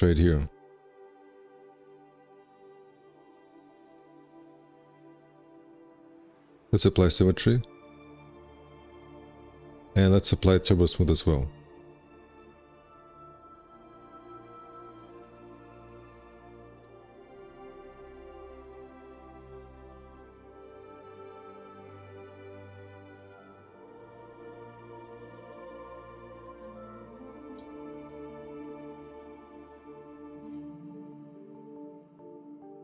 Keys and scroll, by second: 4.5 ctrl+z, 5.0 1, 5.5 q, 13.4 2, 14.7 `, 15.3 1, 16.6 ctrl+1, 26.0 space.